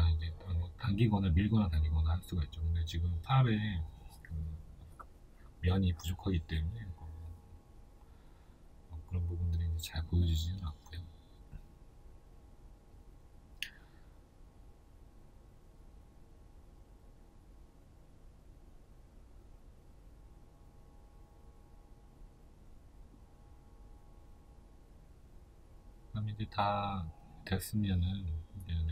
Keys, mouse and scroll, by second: 0.3-2.0 middle drag, 2.0 right click, 2.6-4.3 middle drag, 3.0 g, 4.3 right click, 5.6 scroll up 1, 5.9 middle click, 12.4 Tab, 13.0 middle click, 18.3 right click, 25.6 click.